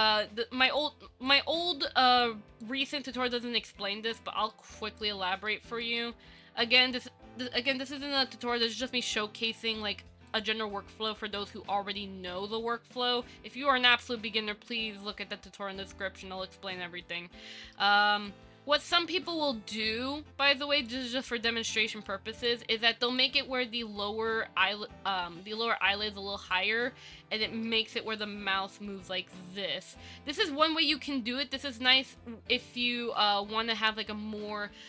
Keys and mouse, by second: 0.9 middle click, 2.4 middle click, 4.2 Tab, 4.7 shift+middle click, 5.1 Tab, 5.2 middle click, 6.0 middle click, 6.7 click, 7.8 ctrl+l, 8.1 h, 8.7 KP_1, 10.4-11.7 drag, 11.7 middle click, 17.7 shift+middle click, 18.4-19.5 drag, 20.0-21.1 drag, 21.3 click, 22.2 click, 23.4-26.7 drag, 27.6 shift+middle click, 28.4 click, 32.3 shift+middle click, 34.7 ctrl+z.